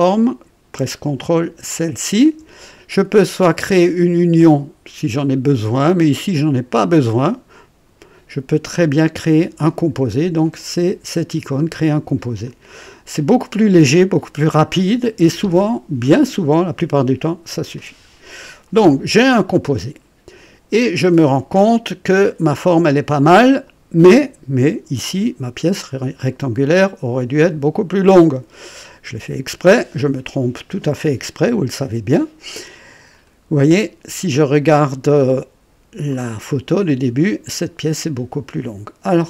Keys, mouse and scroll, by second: 1.7 ctrl+click, 10.5 click, 12.4 click, 19.2-21.2 drag, 21.6-23.7 drag, 33.1 click, 36.1 click.